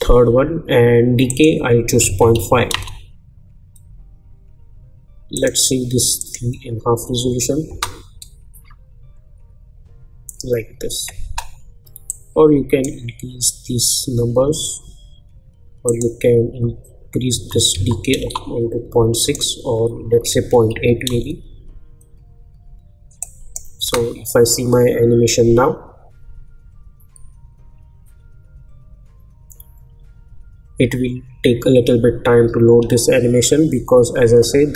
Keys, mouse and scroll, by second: 2.7 Return, 5.3 click, 7.7 space, 11.3 space, 12.1-15.8 drag, 18.2 Return, 19.2 click, 21.1 Return, 23.4 click, 23.8 space.